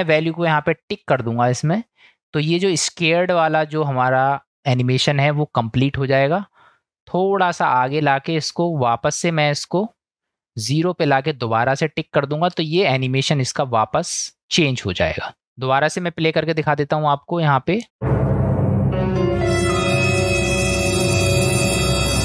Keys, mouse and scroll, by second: 1.6 click, 7.5-8.8 drag, 10.4 click, 12.3 click, 15.9 click, 16.8 click, 17.9 space.